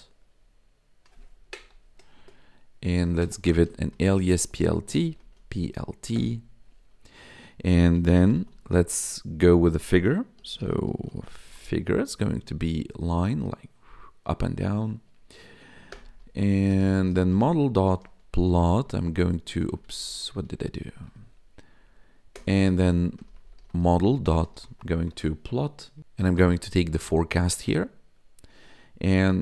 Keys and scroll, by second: 0.1 y, 1.4 Down, 1.6 Tab, 2.1-5.1 typing, 6.1 Return, 7.8-9.0 typing, 10.1-11.9 typing, 12.0 Right, 15.8 Return, 16.4-19.4 typing, 22.3 Return, 22.9-27.5 typing, 27.6 Tab.